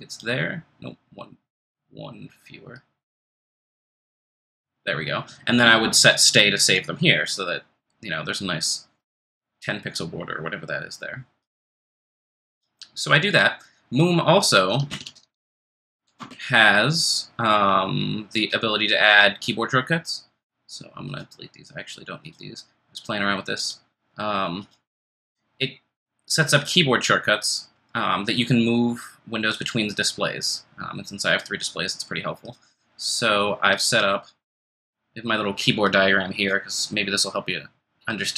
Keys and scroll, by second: 14.8 ctrl+space, 15.1-16.4 typing, 18.4 typing.